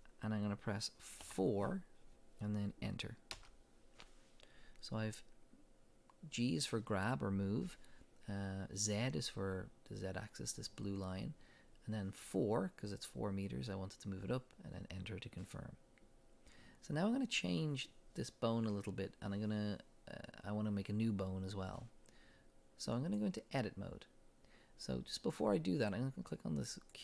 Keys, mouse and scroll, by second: 3.4 Return, 23.0-26.9 drag.